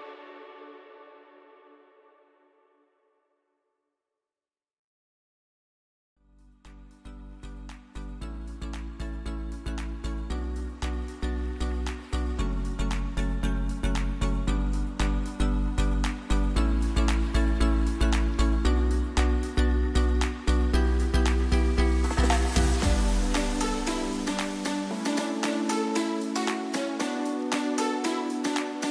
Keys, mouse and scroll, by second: 4.4 ctrl+d, 7.4 click, 8.2 m, 8.8-12.8 drag, 13.8 ctrl+d, 15.2 v, 24.6 ctrl+d, 26.1 alt+scroll down 1.